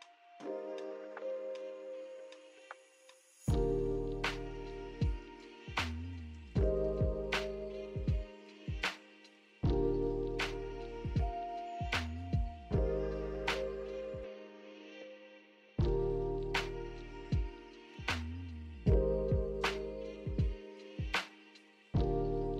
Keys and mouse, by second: 0.4 shift+middle click, 2.1 click, 2.4 middle click, 2.6 Tab, 2.8 middle click, 3.8 shift+click, 4.3 shift+middle click, 4.5 middle click, 4.8 shift+middle click, 5.1-5.4 drag, 5.4-6.5 shift+middle drag, 6.5-7.1 drag, 7.5-7.9 drag, 9.3 click, 10.1 click, 10.4-10.8 drag, 11.3 Tab, 11.7 shift+click, 12.4 click, 12.8 shift+KP_1, 13.0 shift+click, 13.4 click, 14.1 click, 14.3 alt+shift+z, 15.1 alt+click, 16.1 click, 16.3 shift+click, 17.1 click, 17.7 shift+click, 18.0 alt+z, 18.2 click, 19.3 shift+click, 21.4-22.2 shift+drag.